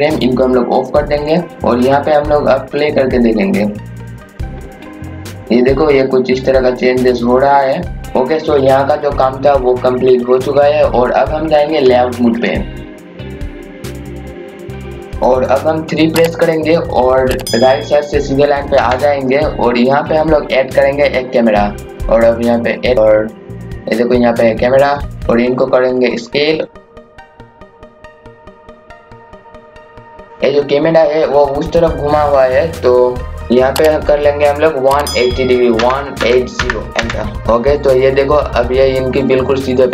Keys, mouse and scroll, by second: 1.2 click, 8.1 scroll up 1, 9.0 scroll down 1, 10.0 scroll up 1, 13.8 click, 15.1 KP_2, 18.7 KP_3, 20.0 scroll down 1, 21.1-21.5 scroll up 1, 22.2-28.4 drag, 28.4-29.2 scroll up 1, 29.2 click, 29.9-30.5 scroll up 1, 37.4 KP_0, 37.5-38.4 scroll down 1, 38.4 scroll up 1.